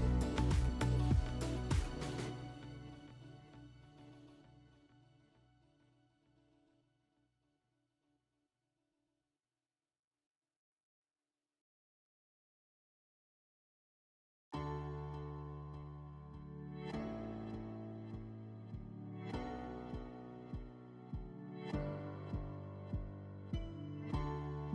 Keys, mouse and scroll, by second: 0.9 alt+w, 2.7 click, 4.3 click, 4.9 click, 6.7 click, 7.3 alt+w, 7.3-8.3 drag, 9.0 click, 14.9-15.9 drag, 17.7 click, 19.6 click, 20.6 alt+w, 21.1 drag, 24.2 click.